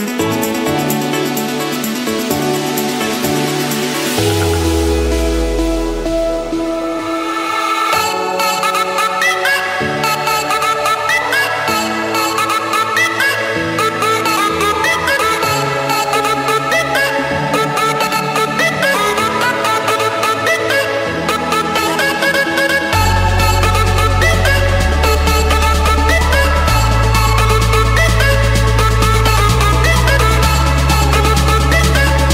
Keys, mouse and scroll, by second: 1.6-2.8 drag, 3.5-4.7 drag, 4.3 Escape, 5.8-7.0 drag, 7.3-8.3 scroll down 1, 8.5-9.5 scroll up 5, 11.4-12.5 scroll down 2, 13.4 click, 16.8 click, 17.5 middle click, 17.6 middle click, 18.2 Escape, 18.8 click, 19.6 click, 21.6 click, 21.9 shift+click, 23.6-24.7 typing, 25.6 Return, 28.5-29.5 scroll down 1, 30.5-31.4 typing.